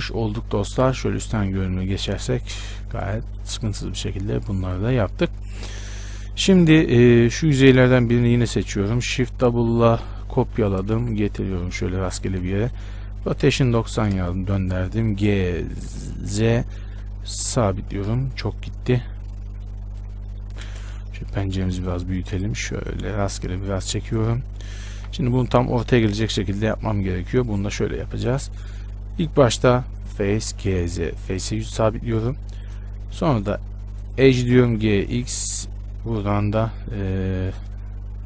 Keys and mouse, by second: 1.4 KP_7, 1.8 z, 3.2 z, 6.4 Tab, 7.1 z, 8.0 z, 8.6 z, 10.8 shift+d, 12.5 z, 13.4 r, 16.6 g, 19.5-25.2 drag, 21.0 shift+space, 25.2 KP_Decimal, 29.4-34.8 drag, 30.6 g, 34.8 g.